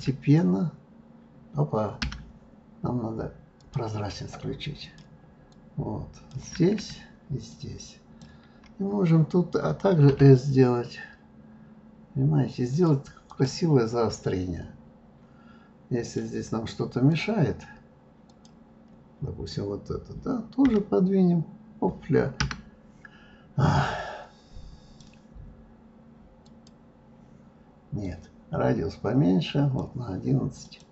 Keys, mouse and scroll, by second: 0.0 s, 3.5 click, 4.8 click, 5.5 click, 7.5 shift+click, 10.1 s, 13.2 click, 16.0 click, 17.1 click, 18.3 click, 20.6 g, 24.0-26.7 drag, 28.0-30.9 drag.